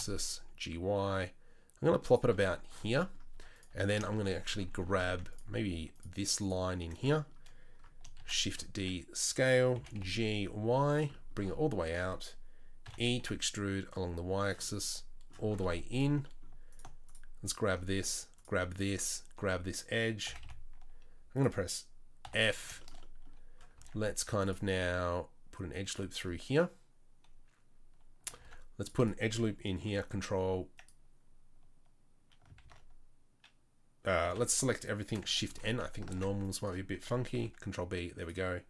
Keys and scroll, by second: 3.3 Tab, 3.7 Tab, 4.9 2, 8.2 shift+d, 8.8 s, 9.8 g, 12.9 e, 20.3 g, 22.3 f, 23.8 ctrl+r, 28.4 ctrl+r, 29.9 ctrl+b, 32.6 ctrl+z, 34.3 a, 35.5 shift+n, 36.1 ctrl+r, 37.4 ctrl+b.